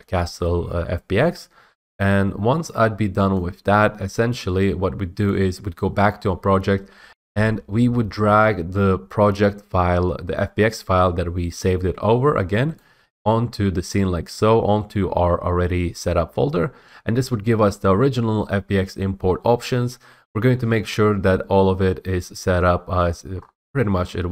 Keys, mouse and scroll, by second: 3.5 click, 5.4 click, 12.9 click, 23.5 middle click, 23.6-24.3 scroll.